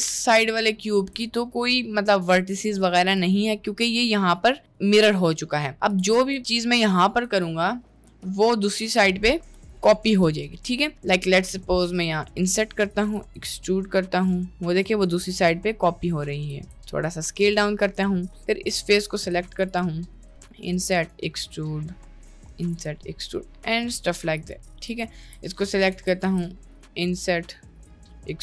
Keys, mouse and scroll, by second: 1.0 1, 1.3 click, 1.7 middle click, 3.7 middle click, 5.5 middle click, 6.3 b, 7.3 g, 8.2 middle click, 8.8 ctrl+shift+b, 10.5 middle click, 12.0 i, 13.2 e, 16.5 s, 17.4 middle click, 18.0 click, 18.3 middle click, 19.2 4, 19.5 3, 19.7 click, 20.1 middle click, 20.3 i, 20.9 e, 22.2 i, 22.8 e, 25.9 o, 26.3 o, 26.7 i, 27.9 e, 28.1 s.